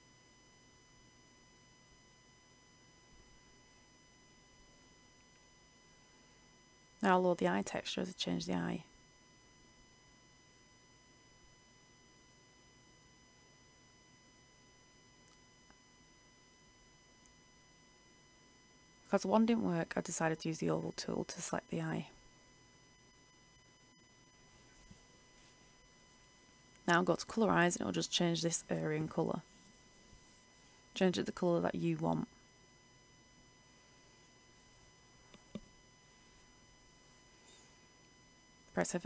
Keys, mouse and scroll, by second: 3.2-7.2 drag, 14.6-15.0 ctrl+scroll, 16.5 click, 17.5-32.6 drag, 33.4 ctrl+d, 33.5 ctrl+shift+e, 36.7 click, 37.1 F8, 38.6-39.0 scroll down 1.